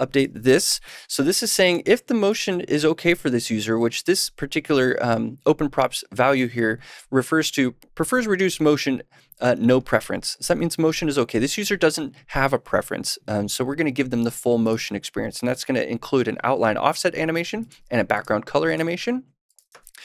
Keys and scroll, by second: 0.8 super+/, 19.6 super+s.